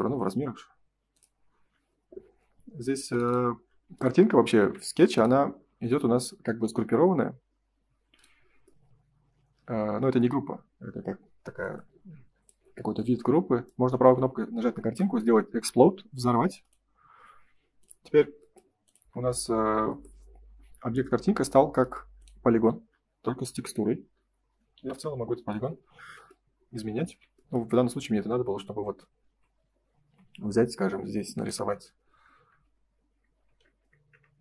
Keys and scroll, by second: 1.3 space, 4.5 ctrl+s, 27.0 ctrl+z, 27.6 space, 30.0 space, 30.4 l.